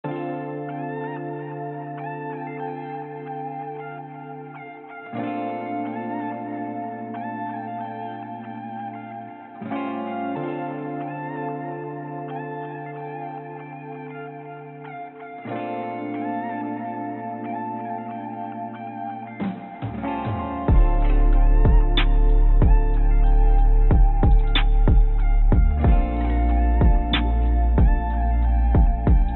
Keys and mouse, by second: 1.5 shift+click, 2.5-4.6 drag, 5.2 ctrl+z, 7.5 shift+click, 8.6-11.1 drag, 12.3 click, 13.3-16.6 drag, 19.7 click, 21.5-23.9 drag, 24.7 click, 25.9 shift+click, 26.7 g.